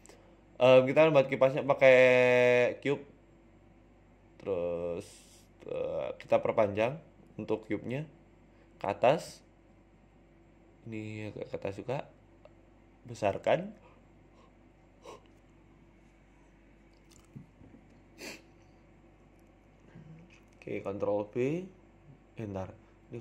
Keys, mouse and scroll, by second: 0.5 Tab, 1.3 shift+a, 4.5 s, 5.5 z, 6.4 z, 7.1 Tab, 8.4 scroll up 3, 8.6 shift+middle click, 9.3 click, 10.4 g, 12.2 right click, 12.7 g, 14.4 right click, 14.7 s, 17.2 click, 17.6 click, 18.0 shift+click, 18.8 shift+click, 19.2 click, 19.6 shift+click, 21.1 ctrl+b.